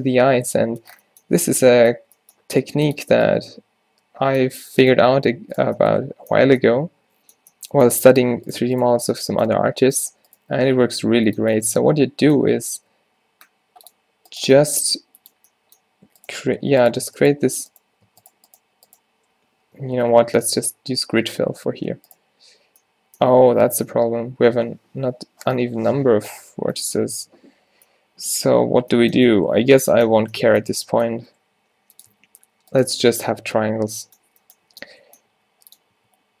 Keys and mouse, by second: 2.1 z, 2.5 g, 3.2 z, 5.2 g, 10.7 f, 12.6 ctrl+r, 14.9 g, 17.9 right click, 20.0-21.0 ctrl+z, 21.3 ctrl+z, 22.1 ctrl+z, 25.6 middle click, 31.5 e, 32.2 s, 33.4 ctrl+z, 34.8 z, 35.4 e, 36.0 s.